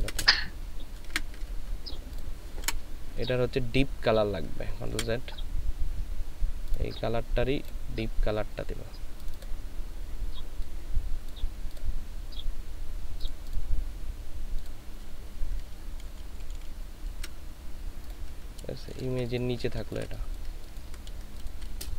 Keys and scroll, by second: 2.6 Delete, 4.9 ctrl+z, 16.1 ctrl+[, 16.4 ctrl+[, 16.6 ctrl+[, 18.8 ctrl+c, 20.5 ctrl+c.